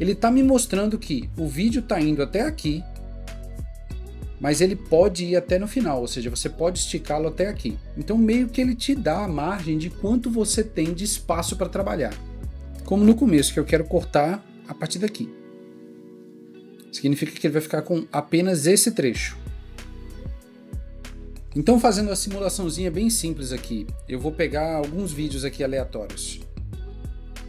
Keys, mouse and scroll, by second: 9.2 click.